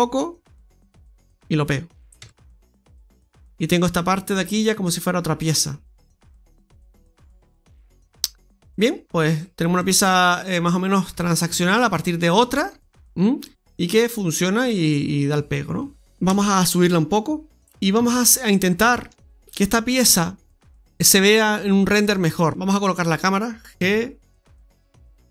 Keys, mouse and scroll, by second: 1.5 click, 1.6-2.0 scroll down 1, 2.1-2.7 scroll down 3, 2.1 Tab, 2.7 middle click, 4.3 scroll down 1, 4.5 middle click, 9.0 scroll up 1, 9.1-9.8 scroll down 3, 9.6 middle click, 10.5-11.0 scroll up 2, 11.4 middle click, 13.1 scroll down 1, 13.3 middle click, 16.0 KP_3, 16.0 g, 18.0 scroll down 1, 18.2 middle click, 18.7 shift+middle click, 19.1 middle click, 19.7 scroll up 2, 20.0 shift+middle click, 21.9 right click, 22.5-23.7 scroll down 8, 22.5 KP_0, 23.7 g.